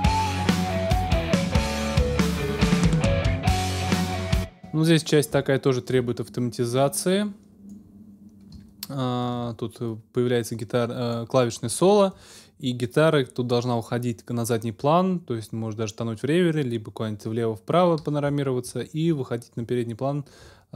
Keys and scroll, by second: 4.1 ctrl+alt+shift+space.